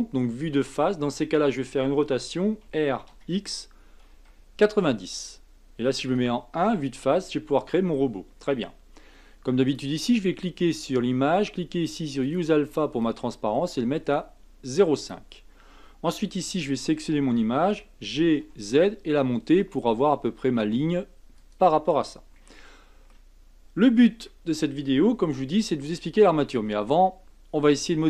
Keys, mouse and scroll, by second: 0.2-2.6 middle drag, 2.6 r, 6.1 KP_1, 7.1-8.5 scroll up 7, 9.6 click, 12.2 click, 13.0-16.0 drag, 16.6 click, 17.7 g, 22.4-24.1 middle drag, 24.1 KP_1, 25.0-25.4 scroll down 2, 25.4-28.0 shift+middle drag.